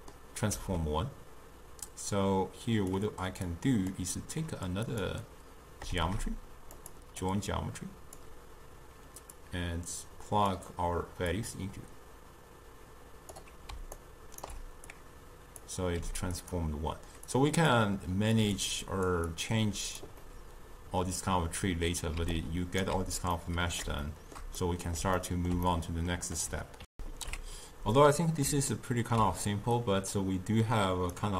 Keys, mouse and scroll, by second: 2.0 click, 3.6 click, 5.0 click, 6.0 shift+d, 7.3-11.5 drag, 14.1-15.0 ctrl+right drag, 15.0-16.1 drag, 16.1 g, 17.4 click, 18.5 click, 18.9 click, 19.4-20.3 drag, 20.3-22.3 middle drag, 22.3 d, 22.5 right click, 22.9 d, 23.0 d, 23.4-27.0 middle drag, 27.0 ctrl+alt+shift+q, 28.0 middle click, 28.7 scroll up 1, 28.9 ctrl+middle click, 29.8-31.3 drag.